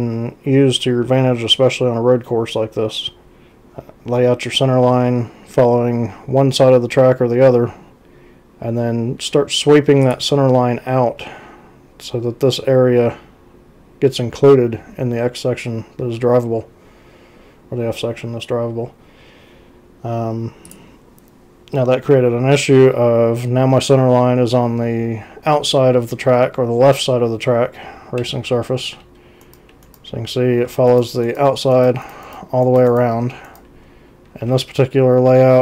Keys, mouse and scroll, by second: 10.1 click, 20.7 click, 22.4 x, 28.2 x, 29.4 ctrl+c, 30.1 z, 30.9 ctrl+c, 33.9 z.